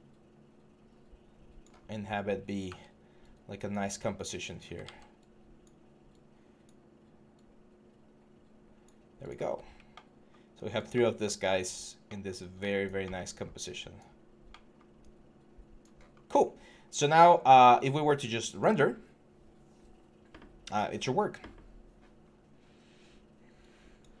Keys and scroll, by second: 2.4 w, 4.6 ctrl+z.